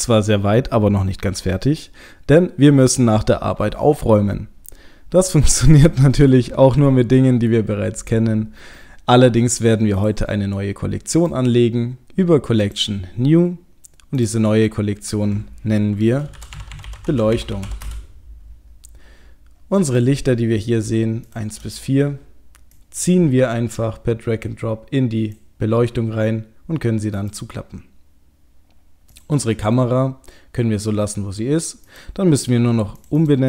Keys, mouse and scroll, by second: 5.6 click, 7.2-8.2 scroll up 1, 8.5-10.0 scroll up 5, 10.0 click, 11.1 right click, 14.2 click, 16.4 click, 19.9 click, 20.3-20.9 scroll down 2, 21.3 shift+click, 21.9-22.7 scroll up 1, 22.7 scroll up 1, 22.7 click, 27.1 click, 29.1 click, 31.0-31.9 scroll down 1, 31.9 click, 31.9 scroll down 2, 33.0 click, 33.3 click.